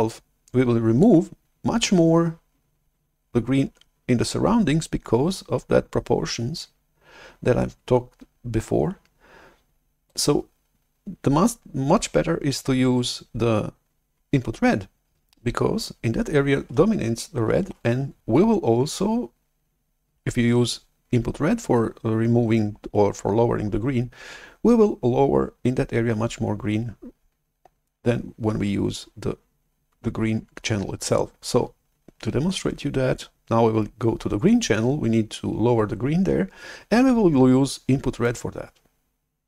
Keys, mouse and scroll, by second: 0.0-3.4 drag, 10.0-12.6 drag, 17.7 shift+super+F11, 38.3-39.4 drag.